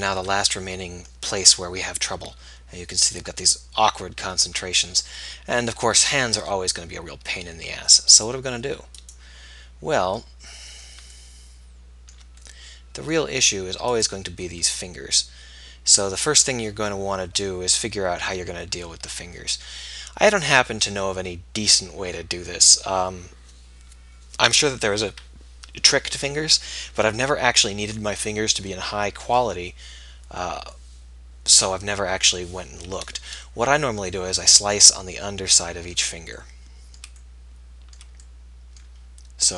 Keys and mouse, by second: 5.2 middle click, 10.5-11.8 middle drag, 12.2-15.0 middle drag, 15.4 middle click, 17.9-19.9 middle drag, 35.2 click, 35.4 middle click, 36.3-39.5 middle drag.